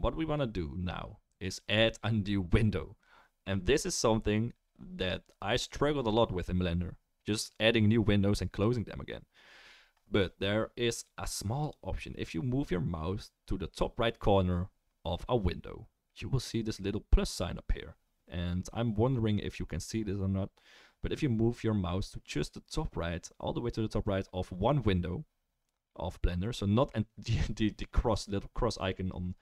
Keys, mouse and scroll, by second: 11.7-29.4 drag.